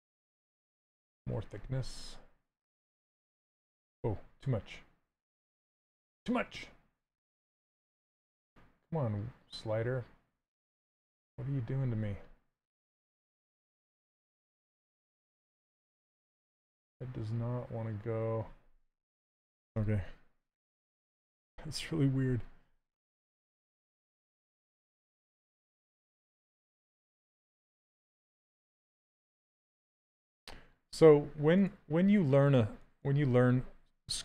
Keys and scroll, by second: 20.1 shift+f, 28.8 shift+f, 30.2 shift+d, 33.8 s.